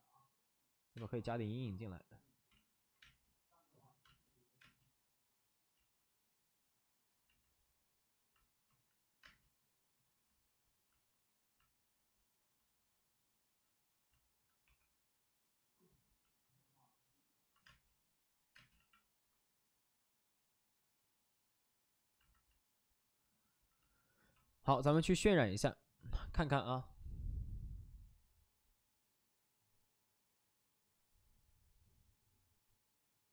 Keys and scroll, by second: 0.9 space, 2.5 ctrl+z, 2.6 ctrl+z, 3.0 space, 4.0 space, 4.5 space, 5.7 ctrl+z, 8.6 ctrl+z, 9.2 space, 14.6 3, 17.6 3, 17.6 space, 18.5 space, 18.7 x.